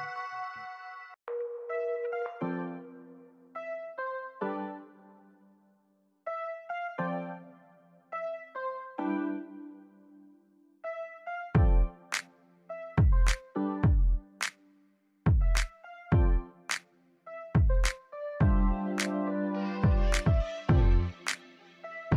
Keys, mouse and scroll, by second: 0.3 click, 3.4 right click, 4.1 scroll up 1, 4.7 right click, 5.0 scroll up 1, 5.3 click, 5.9 scroll down 1, 6.2 alt+click, 6.6-7.0 scroll up 1, 7.3 shift+right click, 12.0-13.6 scroll down 1, 13.6 click, 18.0 click, 21.2 click.